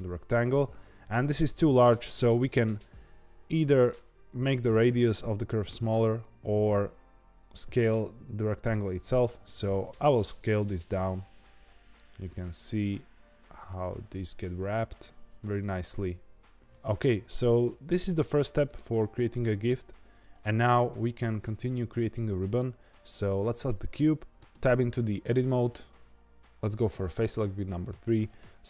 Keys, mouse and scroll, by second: 1.8 click, 9.8 s, 16.6-18.8 middle drag, 18.8 s, 23.4 click, 24.3 Tab, 27.1 3, 28.2 click.